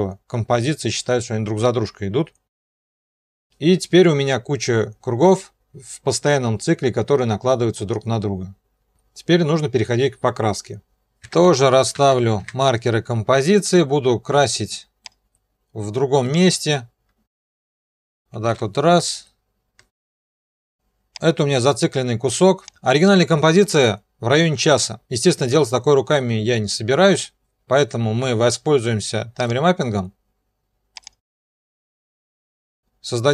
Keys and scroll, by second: 2.9 0, 11.0 shift+Home, 11.2 *, 11.9 shift+End, 18.5 alt+[, 20.5 alt+].